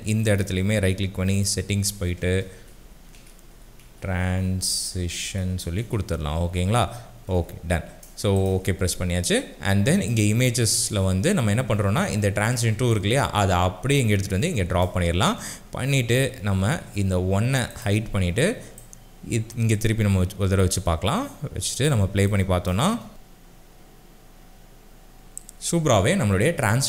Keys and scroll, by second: 2.3-6.3 typing, 7.3 Return, 22.9 space, 25.7 space.